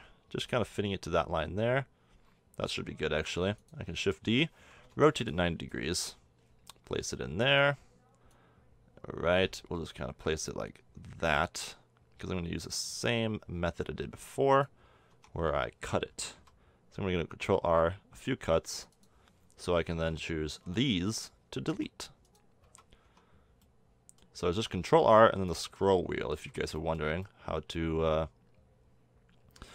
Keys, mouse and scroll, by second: 3.2 shift+d, 4.3 r, 8.3-10.8 drag, 15.1 Tab, 16.3 ctrl+r, 19.7 a, 20.6 b, 21.7 x, 22.6 a, 23.0 Tab, 26.3 z.